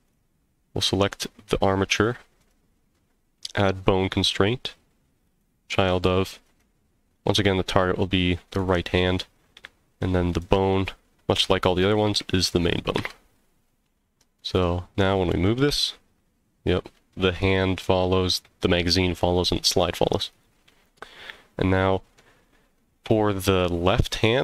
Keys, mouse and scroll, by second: 0.0 click, 2.4-5.4 drag, 6.4 click, 10.3-13.8 drag, 14.5 click, 15.3 g, 20.3 click, 20.3 right click, 21.0-21.3 scroll down 4, 21.7-22.2 middle drag, 22.4 scroll down 1, 22.8-23.4 middle drag, 24.0 click.